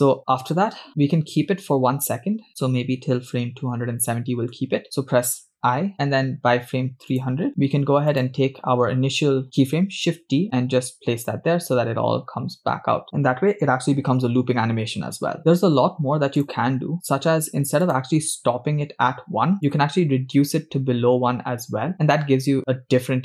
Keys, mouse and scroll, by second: 0.2 scroll down 3, 2.5 click, 4.1 Left, 4.6 Left, 5.7 i, 7.5 click, 8.1 click, 10.5 shift+d, 16.9 click, 18.3 click, 19.7-23.2 drag.